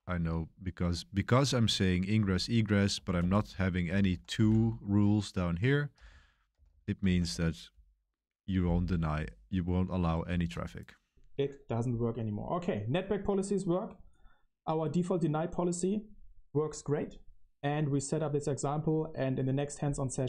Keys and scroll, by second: 0.1 k, 2.1-7.6 typing, 3.1 Return, 9.2 Return, 9.2 typing, 9.9 super+1, 10.1 super+1.